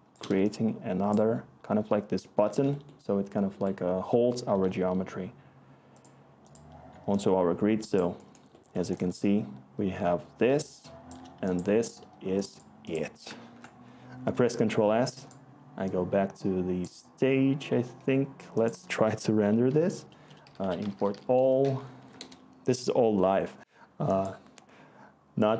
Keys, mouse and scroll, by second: 7.4-9.0 scroll, 9.0-9.6 scroll, 9.6-11.1 click, 9.7 click, 13.4 ctrl+s, 19.0 Tab, 20.2-21.8 typing, 22.2 Return.